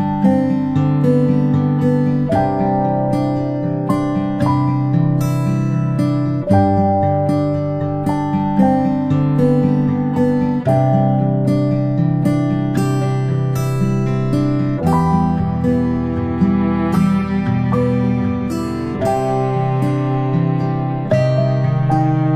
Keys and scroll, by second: 6.0 ctrl+shift+[, 6.4 ctrl+shift+], 8.6 ctrl+shift+[, 9.0 ctrl+], 11.6 ctrl+z.